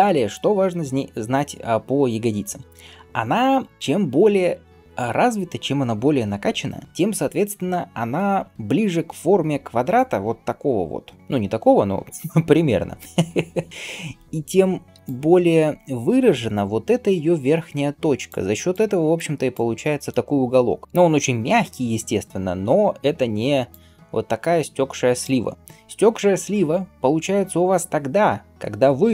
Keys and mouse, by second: 8.2 KP_3, 9.7-11.2 drag, 9.7 d, 9.8-11.2 right drag, 13.7-19.1 drag, 13.7-19.1 right drag, 14.8 d, 18.2-20.8 d, 21.7 d, 23.3-26.3 d, 26.9 d.